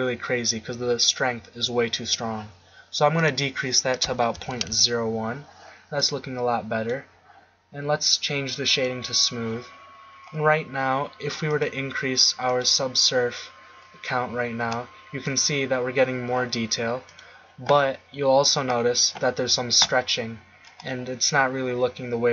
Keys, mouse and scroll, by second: 3.1-5.4 drag, 6.0-7.1 middle drag, 8.6 click, 11.5 click.